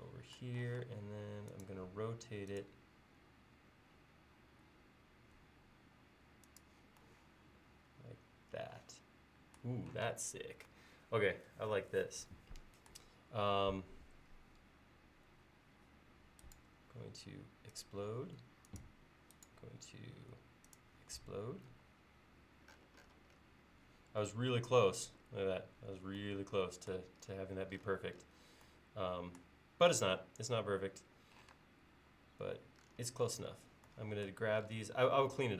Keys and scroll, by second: 0.7 q, 10.1 space, 21.7 l, 31.6 space.